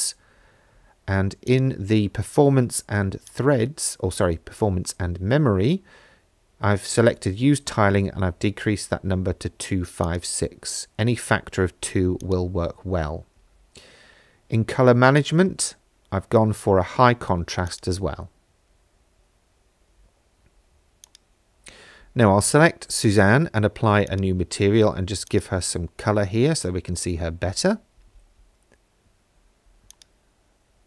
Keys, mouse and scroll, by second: 1.5 click, 3.3 click, 9.1-10.0 scroll down 3, 10.0 click, 10.8-11.8 scroll down 2, 12.2 click, 13.0-14.2 scroll down 7, 15.2 click, 21.0 click, 23.1 click, 24.1 click, 29.9 click.